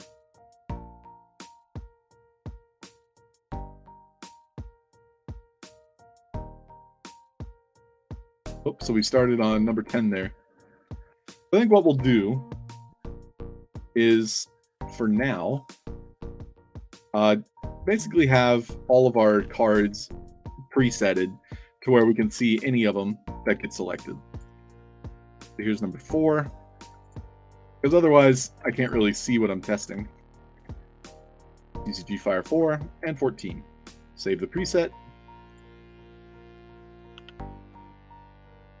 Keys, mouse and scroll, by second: 2.8 e, 4.7 e, 6.4 e, 8.3 d, 9.9 d, 11.1 Tab, 12.6 drag, 13.4-14.6 alt+right drag, 13.9 alt+d, 14.7-15.5 typing, 14.9 click, 16.3-16.6 alt+drag, 17.2 click, 17.7-19.2 typing, 21.2 click, 22.4 shift+click, 22.9 middle click, 23.3-26.1 typing, 23.8 click, 24.2 alt+click, 24.6 middle click, 26.9 click, 28.2 click, 28.5 ctrl+c, 28.7 click, 29.0 click, 29.7 click, 30.0 ctrl+v, 31.7 ctrl+v, 32.4 1, 34.1 click, 34.5 click, 35.4 click, 35.7 click, 36.7 click, 37.4 c.